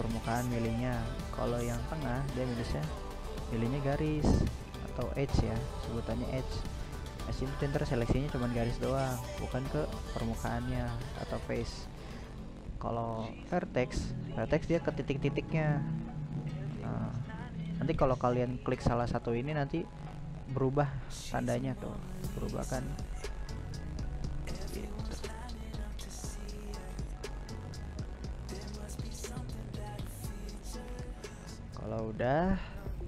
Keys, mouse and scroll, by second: 4.1 right click, 4.5 middle click, 5.5 right click, 6.5-9.8 middle drag, 9.8 click, 10.9 right click, 11.5 middle click, 12.3-13.0 scroll down 2, 13.0 right click, 13.3-15.0 middle drag, 15.0 click, 15.4 click, 15.7-20.8 drag, 25.9 click, 26.9 right click, 27.7 right click, 28.6 click, 29.2 click, 29.7 middle click, 30.4-30.8 scroll up 2, 30.8-33.0 shift+middle drag.